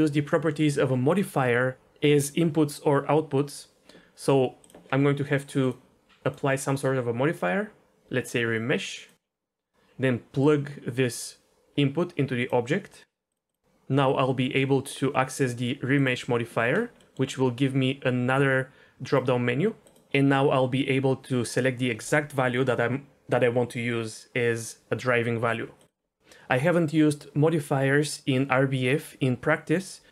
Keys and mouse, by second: 4.6 click, 6.3-9.1 drag, 10.5 click, 10.8-12.5 drag, 13.5-16.0 drag, 19.1-19.8 drag, 20.2-25.9 drag.